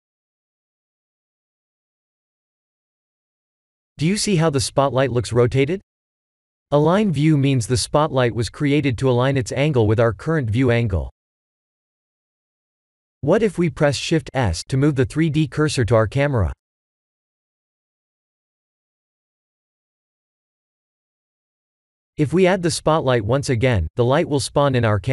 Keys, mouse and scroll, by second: 1.9 click, 6.6 ctrl+z, 8.1 x, 9.8 click, 10.3-12.8 scroll down 8, 13.4 click, 14.5 middle click, 15.4-16.4 scroll down 5, 17.6 KP_0, 18.3 KP_0, 21.3 shift+s, 22.0 shift+s.